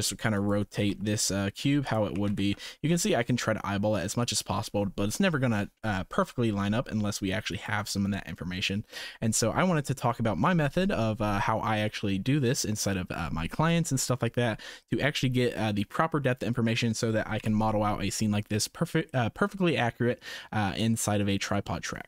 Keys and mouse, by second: 0.7 r, 2.1 g, 6.4 r, 9.3 middle click, 10.1 middle drag, 11.0 shift+middle drag, 17.3 KP_0.